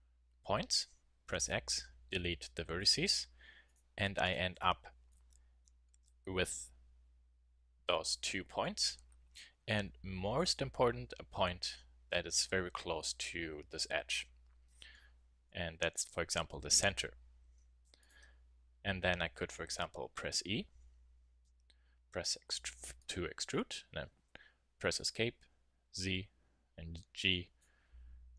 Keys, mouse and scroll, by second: 1.2 x, 3.7-5.9 drag, 5.9-7.0 middle drag, 9.7 a, 10.4-12.3 drag, 12.3 middle click, 16.1 KP_1, 20.5 e.